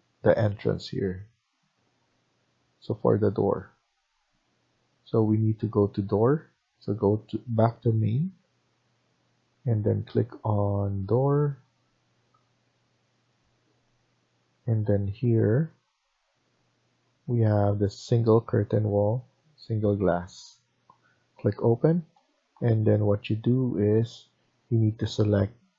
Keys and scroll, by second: 24.4 Tab, 24.8 Tab, 25.2 Tab, 25.6 Tab.